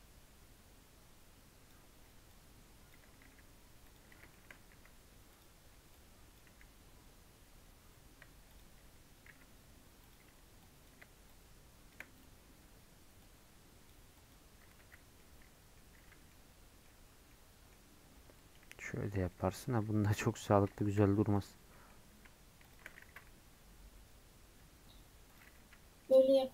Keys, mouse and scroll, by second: 19.5-25.9 middle drag, 26.0-26.5 middle drag.